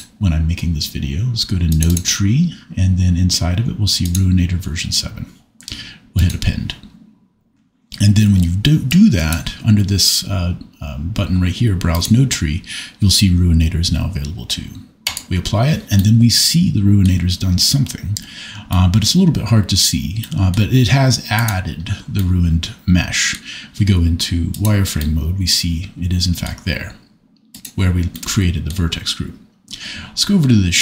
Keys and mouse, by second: 8.9 click, 12.0-15.2 drag, 21.4 click, 24.5 click, 28.1 middle click.